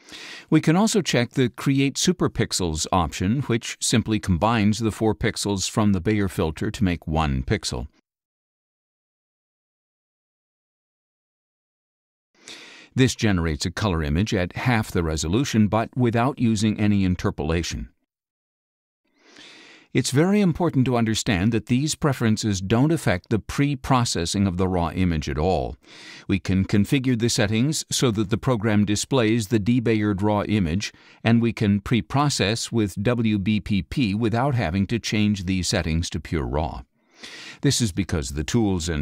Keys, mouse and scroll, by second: 1.6 click, 3.8 click, 8.7 click, 10.2 click, 11.0 click, 12.7 click, 13.6 ctrl+a, 16.0 middle click, 16.1 scroll down 2, 16.9 middle click, 17.0 scroll down 2, 17.8 middle click, 17.9 scroll down 2, 18.5 space, 18.6 click, 19.4 middle click, 19.5 scroll up 2, 24.8 click, 31.2-33.1 drag.